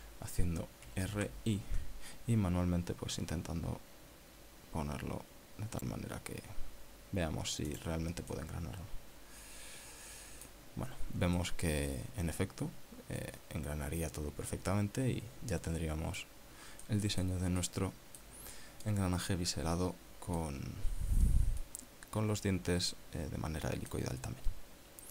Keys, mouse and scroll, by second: 1.7-2.7 typing, 8.8 click, 9.4-11.8 middle drag, 12.5 middle click, 12.8 scroll up 1, 17.6 scroll down 1, 18.0 middle click, 18.7-19.5 middle drag, 19.6 scroll down 1, 20.0-21.7 middle drag, 22.7-25.1 middle drag.